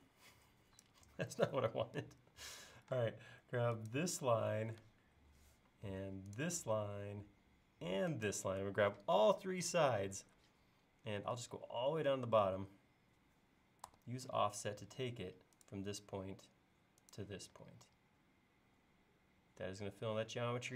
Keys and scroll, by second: 2.5 l, 3.0 space, 13.9 f.